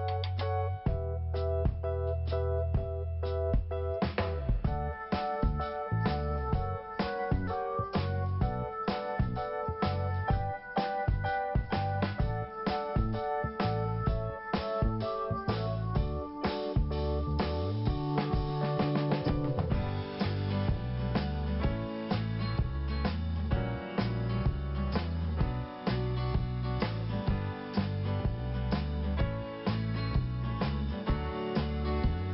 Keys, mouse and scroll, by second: 0.3 scroll up 1, 0.8 scroll down 1, 1.1 scroll up 1, 1.9 scroll up 1, 3.0 click, 3.1 click, 4.0 click, 4.0 click, 4.7 click, 6.5 click, 6.6 click, 6.8 click, 6.9 double click, 7.4 double click, 8.4 click, 8.5 click, 8.9 click, 9.0 click, 14.6 scroll down 1, 15.1 scroll up 1, 19.1 click, 19.2 click, 19.4 click, 19.4 click, 21.1 scroll down 2, 21.6 scroll up 1, 27.9 click.